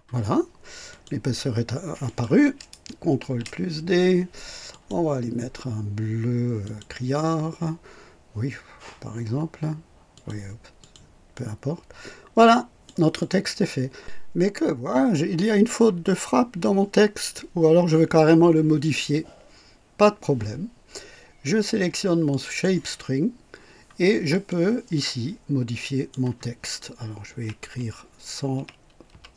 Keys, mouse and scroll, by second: 0.8 click, 2.0 click, 3.2 ctrl+d, 4.6 click, 6.6 click, 10.1 click, 10.7 click, 11.3-13.0 drag, 13.1-13.9 drag, 22.2 click, 24.2 click, 24.8-26.2 drag, 26.9-29.3 typing.